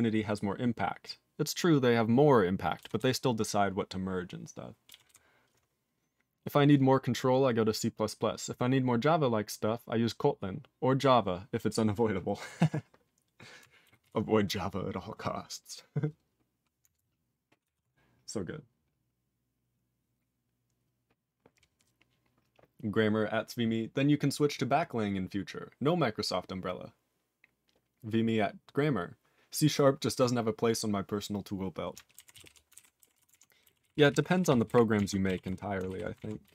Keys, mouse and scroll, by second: 3.0 ctrl+s, 5.1 ctrl+s, 14.0 ctrl+s, 32.3 ctrl+s, 32.4 ctrl+p, 32.7 ctrl+alt+b, 33.1 ctrl+s, 33.3 ctrl+alt+f, 33.8 ctrl+s, 33.9 ctrl+p, 34.1 ctrl+p, 34.3 ctrl+p, 34.4 ctrl+p, 34.5 ctrl+e, 34.7 ctrl+b, 35.0 ctrl+alt+f, 35.4 ctrl+s, 35.9 ctrl+alt+b, 36.2 ctrl+alt+f.